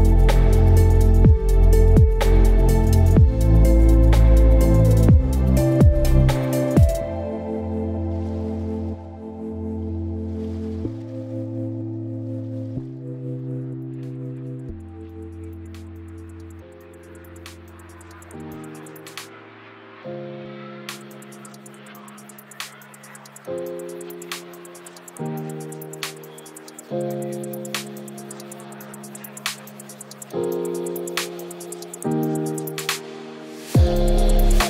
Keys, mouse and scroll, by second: 4.0 t.